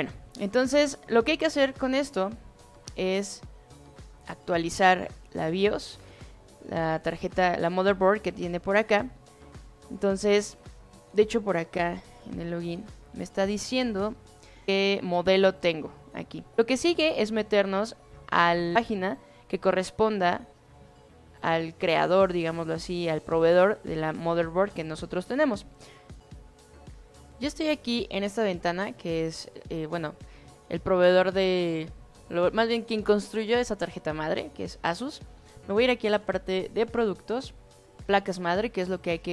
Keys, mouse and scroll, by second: 11.7 click, 36.6 click.